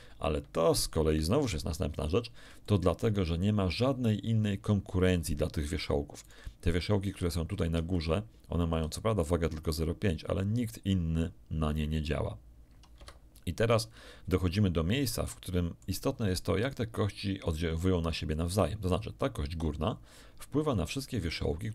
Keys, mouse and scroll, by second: 0.9 Escape, 2.1 scroll down 2, 2.6 shift+middle click, 6.2 right click, 7.7 d, 7.9-8.9 drag, 8.0 d, 12.9 Escape, 15.2 shift+middle click, 16.6 shift+middle click.